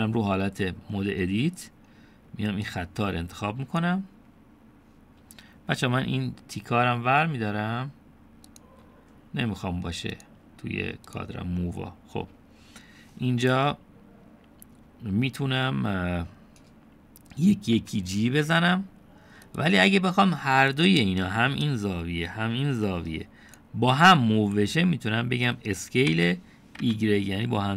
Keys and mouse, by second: 3.7-4.8 drag, 9.5-10.7 drag, 11.3-12.6 drag, 18.8 g, 21.7-24.6 drag, 27.1 s.